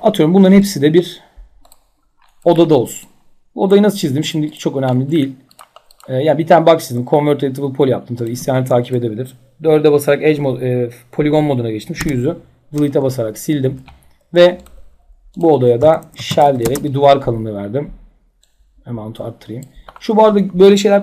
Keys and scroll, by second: 8.1 4, 12.0 Delete, 15.6-16.8 typing.